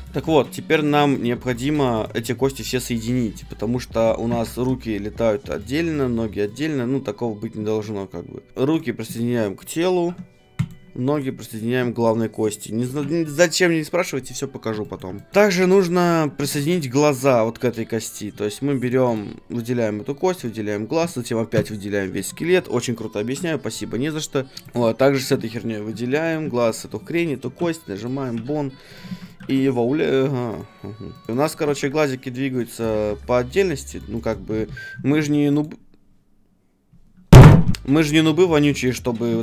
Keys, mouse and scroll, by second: 1.4-3.4 right drag, 3.4 middle click, 4.0-11.1 right drag, 4.3 ctrl+Tab, 4.7 g, 6.1 g, 7.5 ctrl+Tab, 8.5 a, 9.9 shift+p, 11.1-14.0 right drag, 14.0 shift+p, 14.8-16.5 middle drag, 16.4 ctrl+Tab, 16.6-18.8 right drag, 18.8 middle click, 19.1 ctrl+Tab, 19.1-20.9 drag, 20.3 middle click, 20.3-28.6 right drag, 23.2 shift+p, 24.5 ctrl+Tab, 24.5 r, 24.8-27.1 middle drag, 27.4 shift+p, 28.3 a, 28.9-32.4 right drag, 29.1 ctrl+Tab, 29.4 r, 31.3 r, 31.6 r, 32.4 middle click, 32.6-36.0 right drag, 32.9 r, 36.0-37.7 middle drag, 38.5-39.4 middle drag.